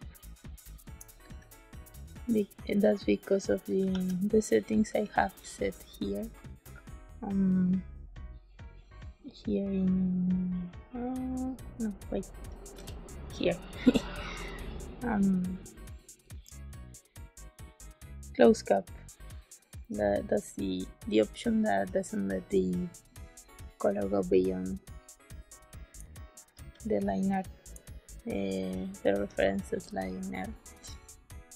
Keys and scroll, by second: 1.1 b, 3.8 ctrl+s, 12.7 g, 25.9 space.